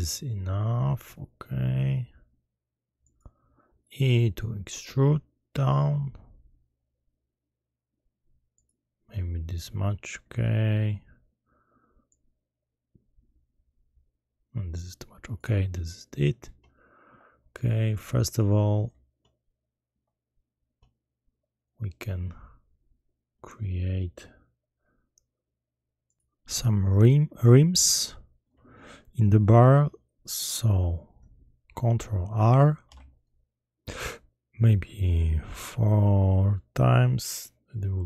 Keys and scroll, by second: 32.8 ctrl+r.